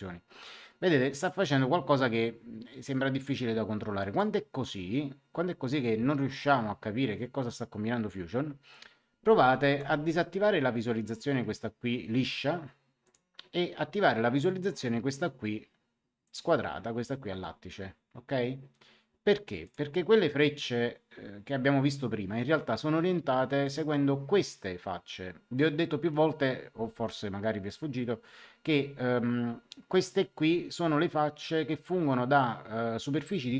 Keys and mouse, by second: 9.6 Escape, 13.0 click, 16.2 click, 19.6 click, 23.6 click.